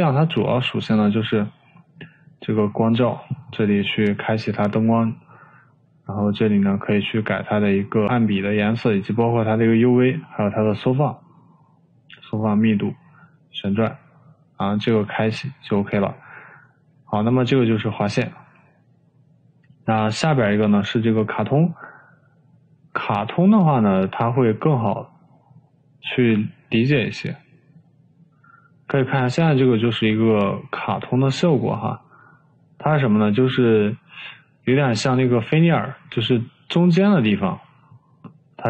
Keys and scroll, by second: 37.5 Escape.